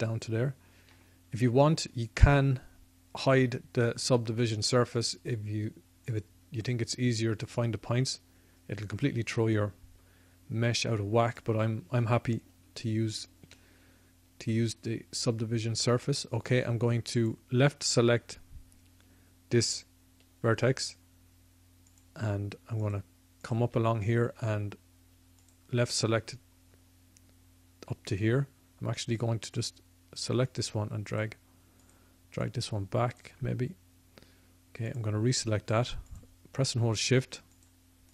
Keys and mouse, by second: 6.1-38.1 drag.